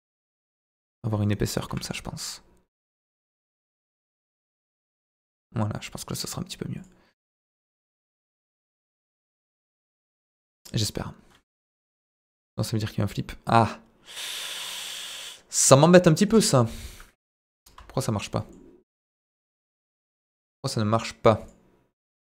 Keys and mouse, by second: 0.1 KP_0, 0.5 KP_Enter, 1.7 g, 3.1 click, 3.6 middle click, 4.0 Tab, 4.7-5.4 middle drag, 5.7-6.1 middle drag, 6.7 click, 7.5-8.2 middle drag, 9.8 click, 10.1-12.3 drag, 13.1-15.1 drag, 17.2 KP_Divide, 17.7 z, 18.3 middle click, 18.9 middle click, 20.4-22.0 drag, 22.0 middle drag.